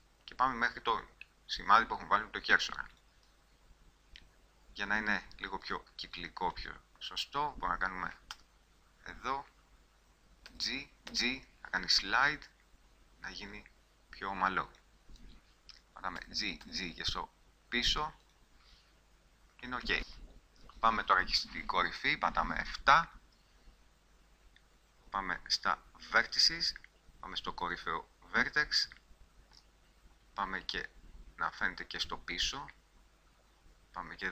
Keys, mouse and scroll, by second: 3.2-5.1 middle drag, 5.8-8.5 middle drag, 8.5 z, 10.7 g, 13.8 click, 16.3 g, 20.2 click, 20.4-22.1 drag, 22.1 KP_7, 24.1-25.4 middle drag, 28.5 middle click, 29.9-30.9 middle drag.